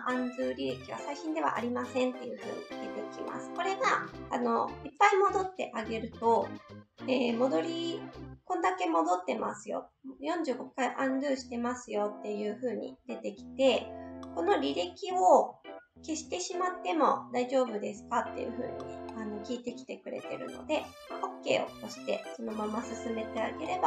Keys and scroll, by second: 23.6 s.